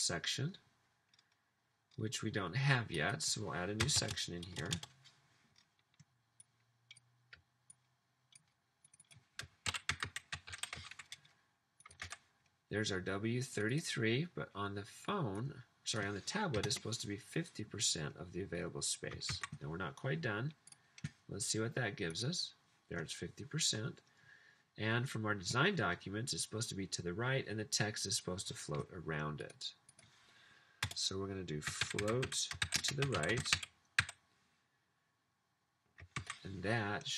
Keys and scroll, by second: 3.8 Return, 3.9 Return, 4.0 Return, 4.3 Return, 9.4-11.2 typing, 12.1 super+v, 16.3-17.1 typing, 19.3 super+s, 31.0 Return, 31.4-34.5 typing, 36.3 super+s.